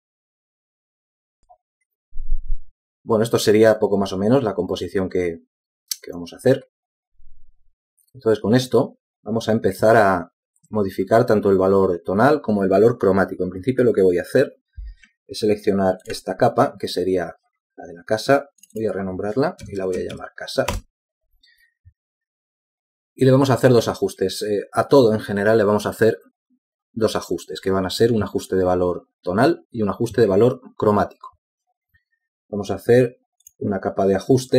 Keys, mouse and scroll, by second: 21.0-21.5 typing, 22.1 Return.